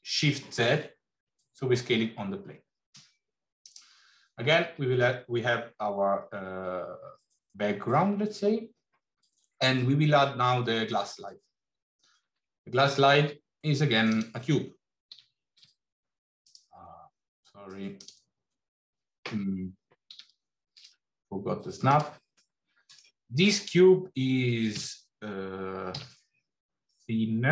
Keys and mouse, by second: 12.1 shift+a, 15.0 g, 17.9 click, 19.9 g, 22.4 middle click, 24.7 s.